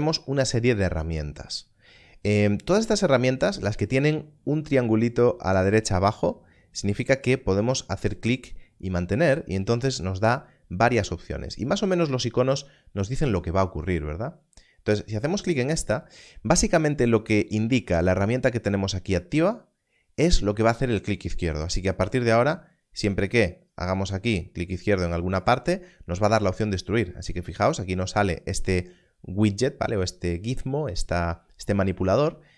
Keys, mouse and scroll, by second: 7.2 click, 22.9 click, 32.1 click.